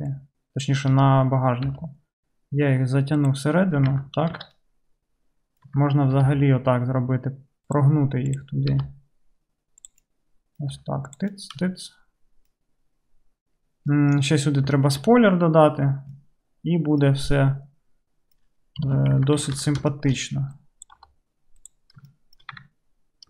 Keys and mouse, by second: 0.1-3.4 middle drag, 0.1 1, 1.7 g, 4.0 Tab, 4.4 alt+z, 4.7 click, 4.9-12.2 drag, 6.3 g, 8.3 middle click, 8.3 right click, 10.8 g, 11.7 Tab, 12.6-15.6 drag, 15.6-17.4 right drag, 17.4 drag, 17.7 right click, 17.8 drag, 17.9 right click, 18.0-23.2 drag, 18.8 KP_3, 19.2 Tab, 19.6 alt+z, 20.7 middle click, 20.7 right click, 21.0 g, 22.6 Tab.